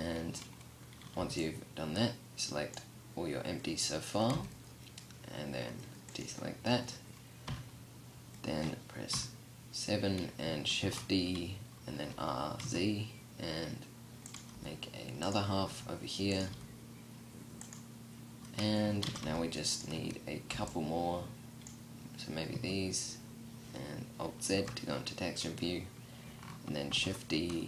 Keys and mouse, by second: 0.8 b, 3.7 c, 8.5 KP_7, 10.3 shift+d, 13.9 g, 15.1 r, 15.9 g, 18.7 a, 18.7 b, 19.5 z, 19.9 b, 22.1 z, 23.9 alt+z, 26.4 shift+d, 27.5 r.